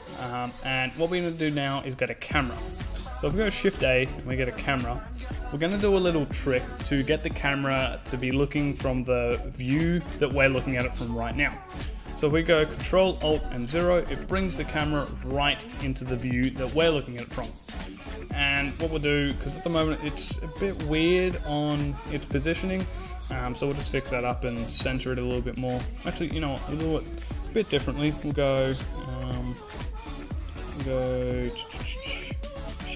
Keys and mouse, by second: 1.9 shift+a, 12.6 ctrl+alt+KP_0, 23.4 shift+f, 24.7-26.5 drag, 32.4 shift+s.